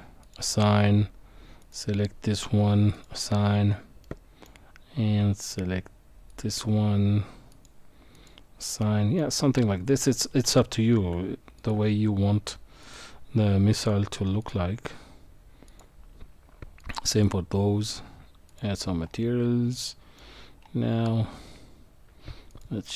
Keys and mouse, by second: 1.6 click, 3.0 click, 4.0 middle click, 6.3 click, 7.5 click, 8.1 click, 8.8 middle click, 10.4 Tab, 11.6 click, 12.8-14.5 drag, 15.7 click, 16.8-18.6 drag, 19.9 middle click, 22.6-22.9 drag.